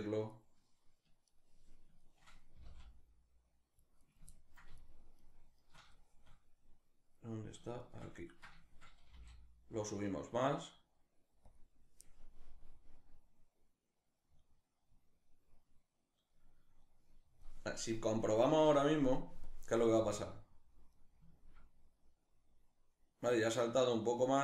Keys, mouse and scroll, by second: 2.2 g, 3.7 right click, 4.0-4.4 ctrl+middle drag, 4.4 shift+right click, 4.8 shift+right click, 5.6-7.4 shift+middle drag, 7.4 shift+right drag, 7.9-11.2 ctrl+middle drag, 8.7 g, 11.2 click, 12.0-19.1 drag, 19.6 space, 20.7-22.8 ctrl+middle drag, 23.1-23.7 middle drag.